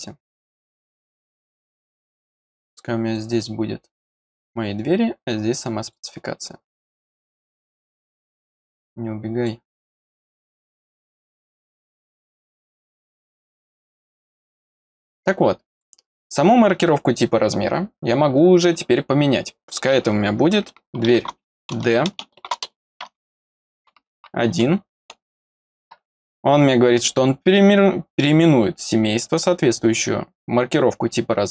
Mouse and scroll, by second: 3.1 click, 4.7-5.9 drag, 7.7-9.4 drag, 10.3-12.0 drag, 12.9 click, 14.1 click, 15.7 click.